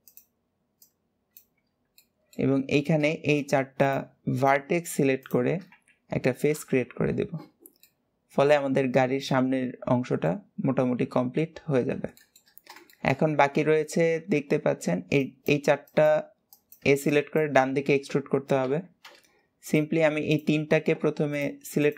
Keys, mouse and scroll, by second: 0.6 click, 1.5-1.8 scroll down 1, 1.8 middle click, 3.6 shift+click, 4.1 shift+click, 5.0 shift+click, 7.7-10.8 middle drag, 11.9 shift+middle click, 12.4 scroll down 1, 12.7 shift+middle click, 13.3 Tab, 13.9 Tab, 19.5 click, 20.1 shift+click, 21.1 shift+click, 21.6 shift+click.